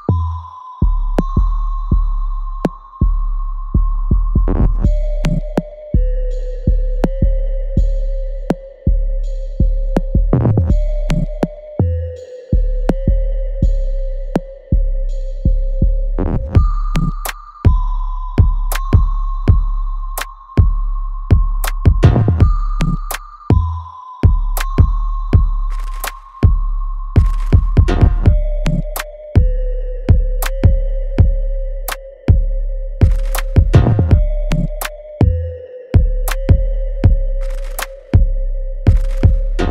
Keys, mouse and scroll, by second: 0.1 click, 0.4 alt+right click, 1.5-6.5 alt+drag, 6.5 alt+middle click, 6.6 alt+scroll up 1, 8.9 click, 12.4 s, 15.2 space, 15.3 f, 17.4 click, 18.2 alt+middle click, 19.3 ctrl+s, 19.9 alt+click, 20.4 alt+middle click, 21.6 alt+click, 22.0 alt+middle click, 22.4 alt+right click, 22.8 alt+click, 23.5 right click, 24.6 click, 25.7-27.2 alt+drag, 29.5 click, 29.8 alt+right click, 30.5 click, 30.5-32.4 alt+drag, 32.4 alt+middle click, 32.8 alt+right click, 35.4 alt+click, 36.5 alt+middle click, 36.9 alt+click, 37.6 alt+right click, 38.1 alt+middle click, 39.2-39.7 shift+drag.